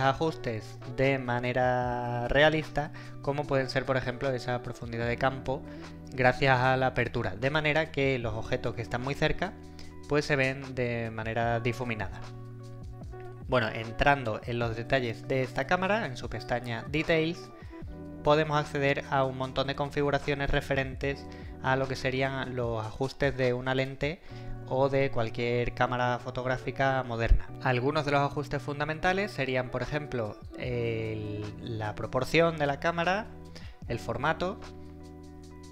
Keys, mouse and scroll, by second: 17.6-18.1 scroll down 1.